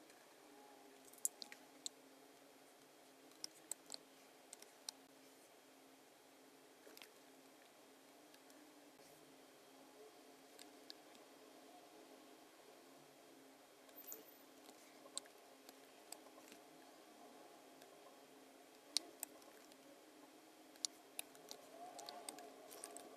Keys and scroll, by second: 3.4 space, 4.6 space, 6.7-7.5 typing, 10.6 v, 11.1 v, 15.7 space, 16.5 v, 18.9 space, 19.7 v, 20.8 space, 22.1 space, 22.9 b.